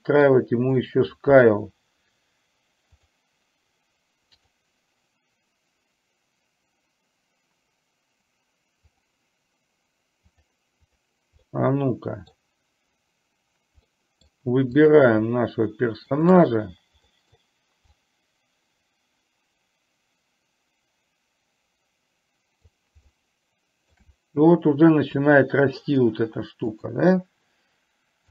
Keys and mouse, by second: 0.9 click, 4.5 click, 11.5-12.4 middle drag, 14.0 middle click, 14.9 drag, 16.2 shift+click, 17.2 middle click, 18.2-22.7 drag, 23.2-24.0 shift+middle drag, 26.8 click.